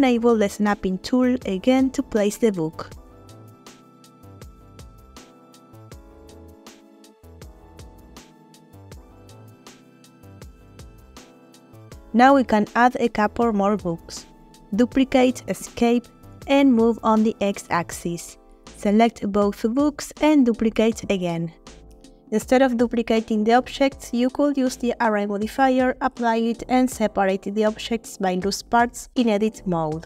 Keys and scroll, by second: 1.9 z, 6.0 g, 6.2 x, 8.7 g, 8.8 x, 9.7 g, 9.9 y, 15.0 shift+d, 15.8 Escape, 16.8 g, 16.9 x, 20.6 shift+d, 21.1 shift+Escape, 21.9 g, 22.2 x, 25.9 shift+d, 26.5 shift+Escape, 27.1 g, 27.2 x.